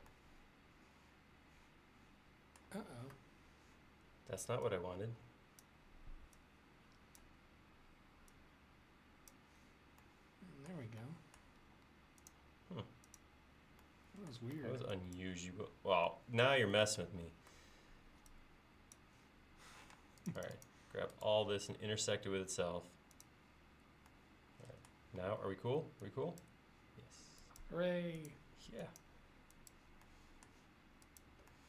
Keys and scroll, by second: 14.6 e, 20.0 space, 25.2 e.